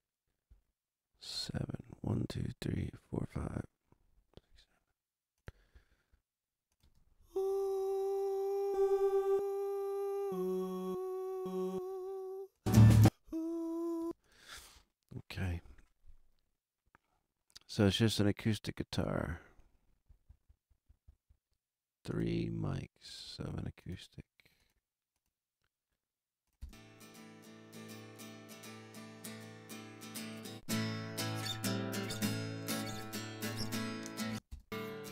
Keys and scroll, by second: 6.8 space, 13.9 space, 26.6 space, 34.2 space.